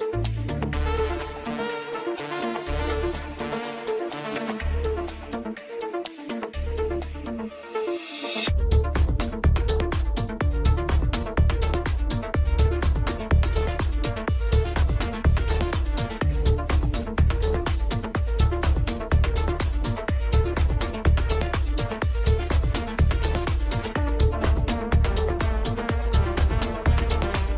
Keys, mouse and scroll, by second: 2.7 KP_0, 7.5 click, 7.7-9.5 middle drag, 9.5-10.3 scroll down 1, 13.5 scroll down 1, 14.1 g, 15.2 middle click, 15.9 r, 18.9 s, 19.9-21.8 middle drag, 21.8 g, 22.6 middle click, 23.3 click, 25.8-27.5 middle drag.